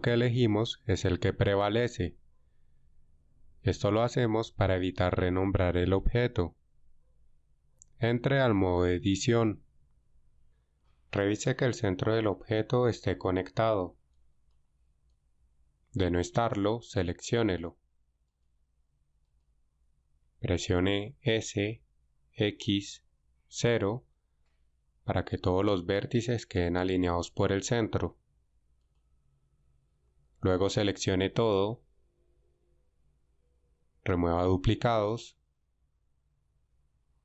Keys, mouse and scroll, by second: 9.8 Tab, 18.3 alt+shift+right click, 19.3 alt+shift+right click, 21.1 s, 22.4 x, 23.5 0, 31.8 a, 32.5 a, 35.7 w.